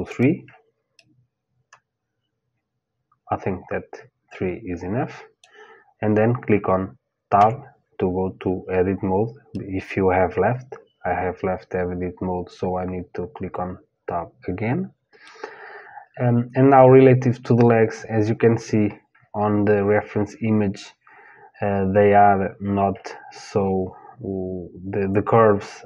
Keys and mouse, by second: 0.6 middle click, 1.7 middle click, 7.0 Tab, 9.1-11.1 middle drag.